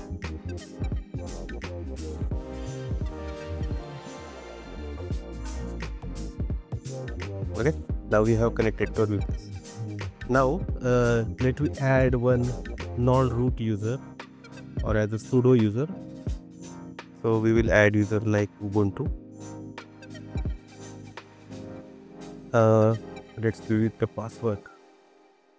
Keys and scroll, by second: 2.1 super+c, 23.9 super+c, 24.6 super+v.